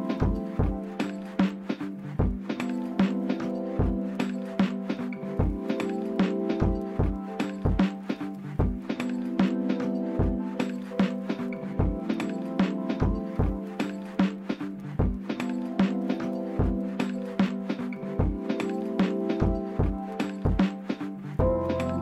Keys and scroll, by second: 3.3 typing, 4.0 Return, 11.9 z, 14.1 p, 19.0 d, 20.1 5, 20.2 Return.